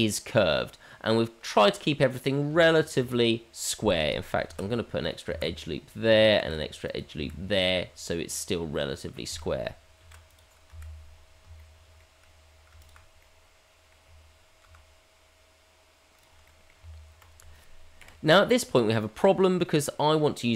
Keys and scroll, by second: 2.5 Tab, 4.4 ctrl+r, 6.4 ctrl+r, 10.0 ctrl+r, 14.6 g, 16.8 Tab.